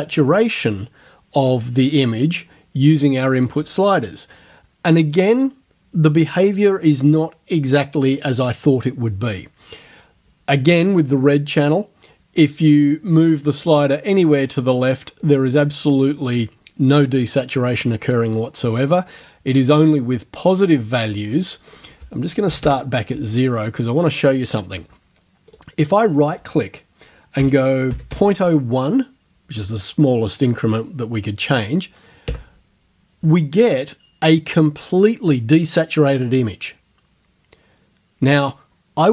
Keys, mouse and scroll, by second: 13.0-14.0 drag, 14.7 click, 15.2 click, 15.9 click, 21.7 right click, 22.5 KP_0, 22.6 KP_Enter, 25.5 right click, 27.4 KP_Decimal, 27.9 KP_0, 28.1 KP_1, 32.3 KP_Enter.